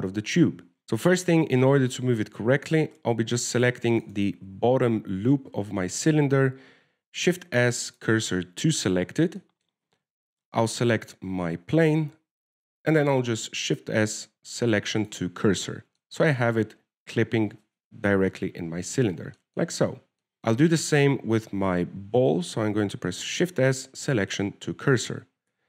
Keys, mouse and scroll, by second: 0.8 shift+middle click, 0.8-1.2 scroll down 5, 1.2 right click, 2.5-2.9 scroll up 2, 3.1 shift+middle click, 3.5-3.9 scroll up 2, 3.9 Tab, 4.2-4.9 scroll up 3, 4.9 right click, 4.9 scroll up 1, 5.3 alt+shift+right click, 5.5 alt+shift+right click, 6.3-6.6 scroll down 1, 8.3 shift+s, 10.2-10.7 scroll down 3, 10.4 Tab, 10.7 middle click, 11.2-11.9 scroll down 1, 11.9 right click, 11.9-12.2 scroll down 1, 13.2 w, 14.5 shift+s, 16.9 middle click, 17.5-18.1 scroll up 4, 19.4 KP_0, 20.3 scroll down 1, 20.4 click, 24.6 shift+s.